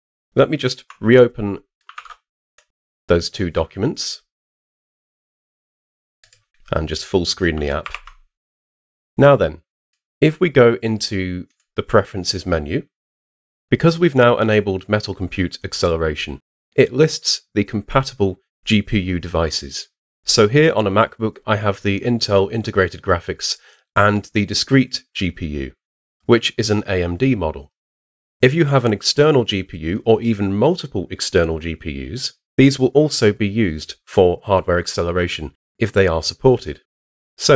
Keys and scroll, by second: 1.9 super+Tab, 7.8 super+0.